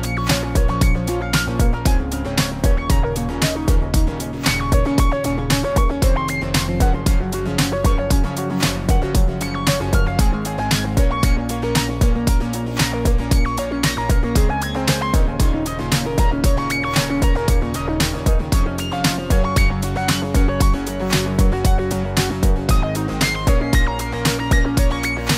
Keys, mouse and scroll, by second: 0.1 shift+click, 0.6 m, 1.6 click, 2.1 shift+click, 2.2 click, 2.3 click, 2.3 shift+click, 2.6 click, 2.8 m, 3.8 click, 4.0 shift+middle click, 4.3 middle click, 4.6 scroll up 1, 4.7 shift+middle click, 4.9 click, 5.2 m, 7.4 click, 7.6 m, 9.3 scroll down 2, 9.4 middle click, 9.7 click, 9.9 middle click, 10.0 shift+middle click, 10.1-10.4 scroll up 2, 10.5 shift+click, 10.7 shift+click, 10.9 shift+click, 11.0 m, 11.7 click, 11.8 click, 12.1 shift+click, 12.3 click, 12.4 m, 15.1 click, 15.2 m, 15.5 click, 15.7 m, 16.4 scroll down 1, 17.0 scroll down 2, 17.5 click, 17.5 scroll down 1, 17.6 middle click, 17.8 shift+middle click, 17.9 middle click, 18.2 shift+middle click, 18.5 click, 19.0 scroll up 2, 19.1 middle click, 19.3 click, 19.4-20.2 click, 19.9 click, 20.0 click, 20.4 click, 20.8 click, 20.9 shift+middle click, 21.1 click, 21.3 shift+middle click, 21.7 click, 21.8 click, 22.1 click, 22.3 click, 22.8 m, 24.4 click, 24.6 click, 25.1 click, 25.1 m.